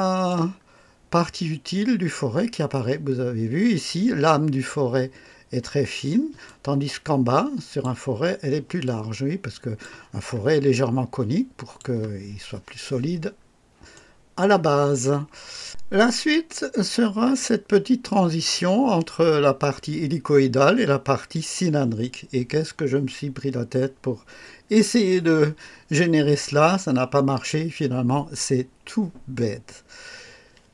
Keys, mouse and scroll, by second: 0.6-1.3 scroll up 2, 5.7-6.1 scroll down 1, 6.4-8.0 drag, 8.8-10.0 drag, 10.1-10.4 scroll down 1, 10.7-12.0 drag, 13.4 scroll up 1, 13.9-14.6 right drag.